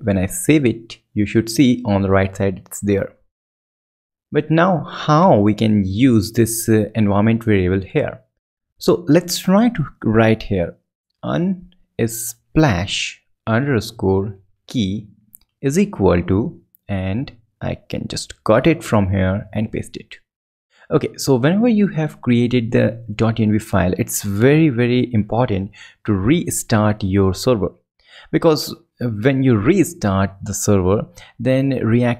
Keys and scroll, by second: 6.2 alt+super+Left, 7.7 alt+super+Right, 8.5 super+BackSpace, 18.6 alt+super+Right, 25.1 ctrl+shift+Left, 26.4 ctrl+shift+Up, 27.6 Up, 30.5 Return, 31.2 Return.